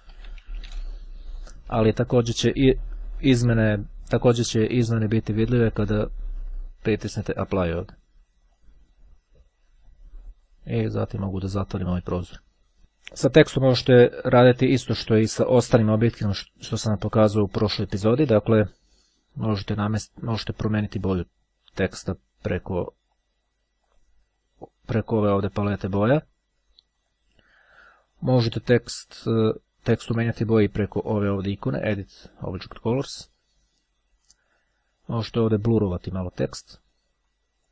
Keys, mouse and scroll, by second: 0.0-0.4 typing, 3.2 ., 7.5-9.2 drag, 11.6 click, 13.2-14.0 ctrl+scroll up 2, 14.0-14.5 ctrl+scroll up 1, 14.5-15.0 ctrl+scroll down 1, 15.2-15.8 ctrl+scroll up 3, 17.1 click, 20.5 click, 22.0 click, 23.2 click, 24.9 click, 27.0 click, 31.6 click, 35.1-37.0 drag, 37.2 click.